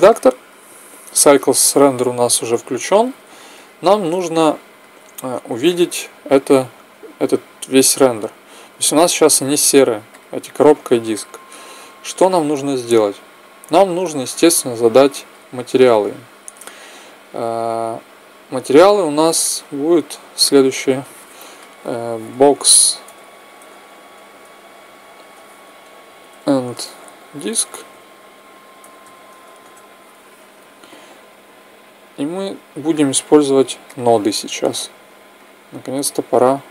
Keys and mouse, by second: 0.0 click, 2.5 Tab, 5.5-7.5 drag, 9.9-11.8 drag, 13.5-15.2 drag, 17.6-22.3 drag, 33.7-35.5 drag.